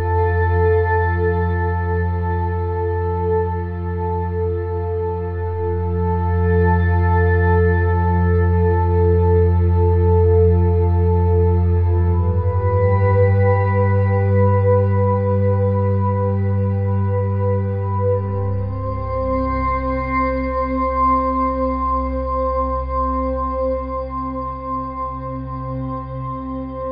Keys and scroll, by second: 17.4 [, 17.7 ], 17.8 [, 17.8 ], 19.6 [, 21.2 [, 22.0 ], 22.3 [.